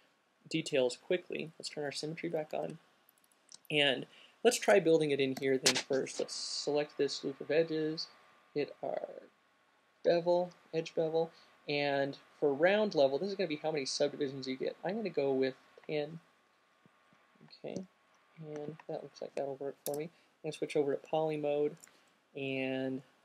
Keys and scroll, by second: 2.2 alt+q, 5.6-6.8 typing, 18.5 alt+q, 20.7 space, 22.8 Up, 23.1 Up.